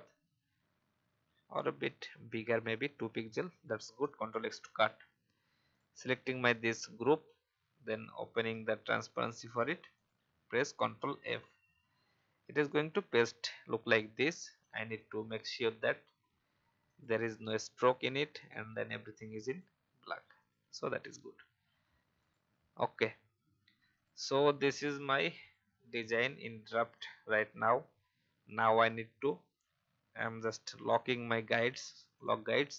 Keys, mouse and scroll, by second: 2.5-3.5 scroll up 1, 3.5 click, 5.7 click, 11.5 ctrl+f, 12.8-13.2 alt+scroll up 1, 15.0-20.7 drag, 23.2-23.6 alt+scroll down 1, 23.9 click, 24.7-25.2 scroll up 1, 25.2-26.5 drag, 29.2 click, 30.3 right click, 31.4-32.7 drag.